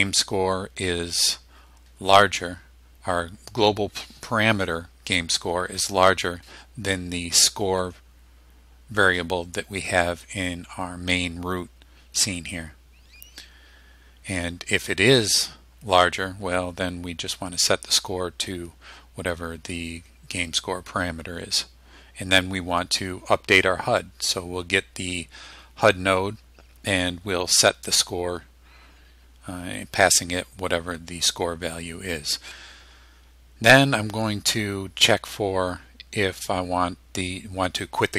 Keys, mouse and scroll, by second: 7.8-8.2 scroll up 1, 12.1 scroll down 2, 12.7-13.0 scroll down 2.